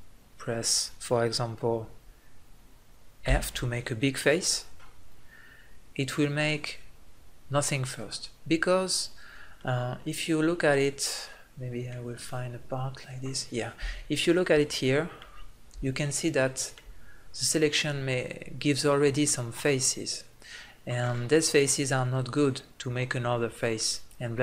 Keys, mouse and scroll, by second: 9.9 middle click, 10.0 middle click, 11.6-13.4 middle drag, 16.0 middle click, 16.7 middle click.